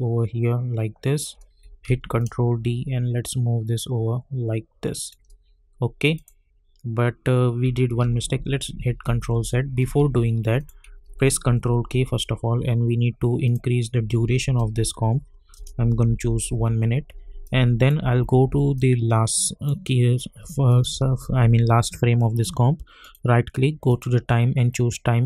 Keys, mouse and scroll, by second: 1.8 ctrl+d, 2.2-6.1 drag, 8.0 ctrl+z, 10.6 click, 11.4 ctrl+k, 13.4 click, 14.5 1, 15.5 Return, 16.0-16.4 typing, 17.4 click, 18.0 =, 18.2 =, 18.4 =, 18.7-20.7 drag, 23.0 right click, 23.9 click.